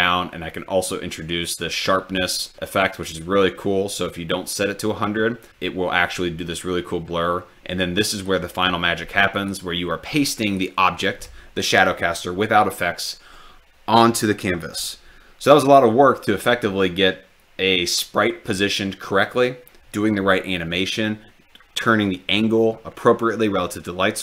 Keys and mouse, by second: 8.2 click, 9.4-9.7 ctrl+drag, 10.4 ctrl+click.